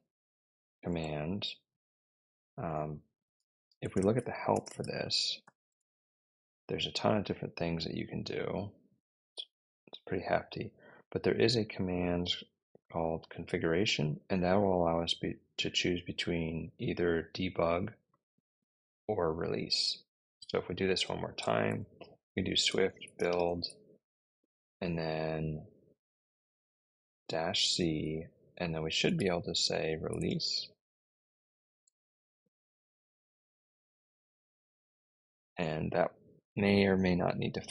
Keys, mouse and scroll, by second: 0.8 Return, 3.3-5.8 typing, 17.9 click, 18.2 click, 18.3 click, 20.3-23.7 typing, 27.0-30.6 typing, 31.7 Return.